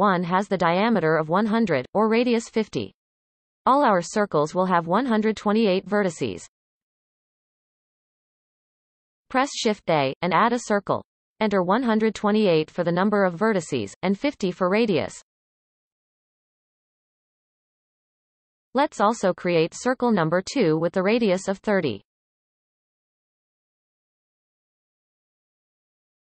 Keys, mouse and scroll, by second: 7.8 shift+a, 10.6-14.7 drag, 15.7-17.8 scroll up 23, 20.5 shift+a, 24.2-26.2 drag.